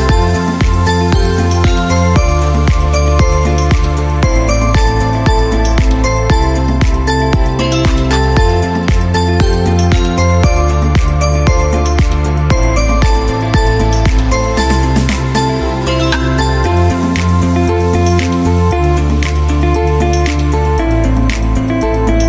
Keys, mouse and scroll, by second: 3.9-6.3 drag, 6.7-9.3 typing, 11.4 typing, 12.2 click, 14.4 click, 16.0 ctrl+d, 17.5 click.